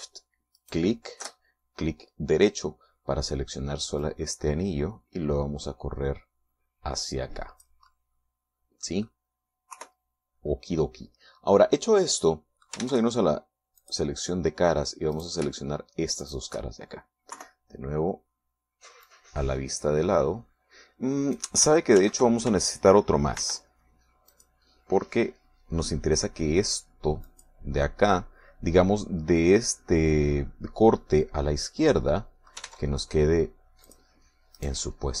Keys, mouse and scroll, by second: 1.6 alt+shift+right click, 5.0-8.8 drag, 8.9-10.2 middle drag, 10.8 KP_3, 13.0 middle click, 13.8 ctrl+Tab, 14.8 click, 15.1-16.2 middle drag, 16.2 right click, 16.4 shift+middle click, 17.2 shift+right click, 18.4 KP_3, 18.8 middle click, 20.1-22.6 drag, 23.0 ctrl+z, 24.4 ctrl+r, 25.4 click, 28.3 click, 33.0 middle click, 33.8 ctrl+Tab, 34.9 click.